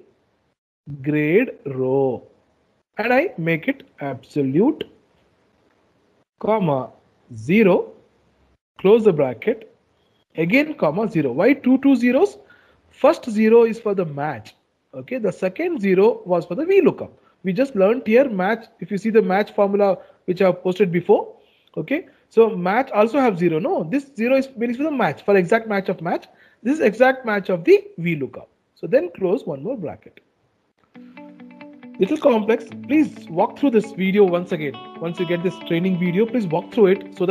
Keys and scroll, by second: 3.1 F4.